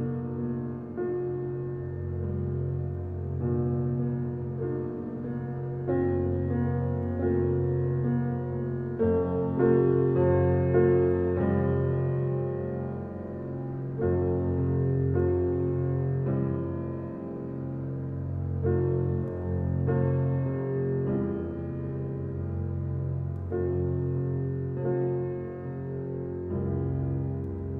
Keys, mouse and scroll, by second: 1.5 scroll up 1, 10.4 scroll down 1, 10.7 click.